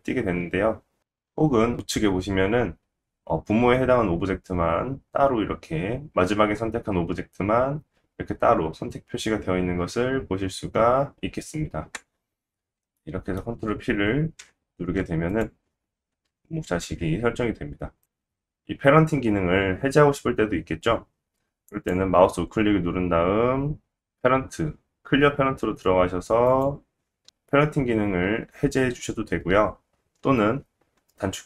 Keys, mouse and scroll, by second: 12.9-13.6 shift+middle drag, 14.4 ctrl+p, 15.7-16.0 middle drag, 15.7-16.0 scroll down 1, 16.3 g, 17.7-21.7 shift+middle drag, 18.2 scroll up 1, 21.7 click, 21.7 right click, 24.2-28.7 right drag, 28.7-31.4 ctrl+drag, 28.9 ctrl+z.